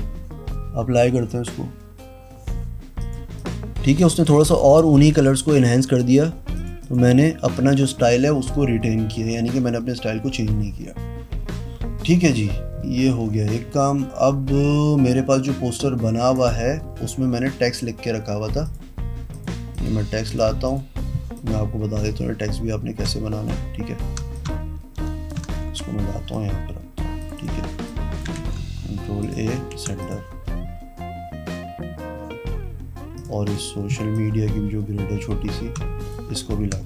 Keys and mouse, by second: 3.2 click, 3.6 click, 4.3 click, 4.7 click, 5.3 click, 5.7 click, 6.7 click, 7.0 click, 16.5 click, 18.8 click, 19.5 click, 19.9 click, 20.5 click, 20.9 click, 21.5-23.7 drag, 24.5-25.5 shift+drag, 25.8 ctrl+t, 26.5 click, 27.8 v, 28.1 click, 28.6 ctrl+a, 29.4 click, 30.0 ctrl+d, 30.2 click, 33.4 click, 33.6 click, 34.3-36.3 drag.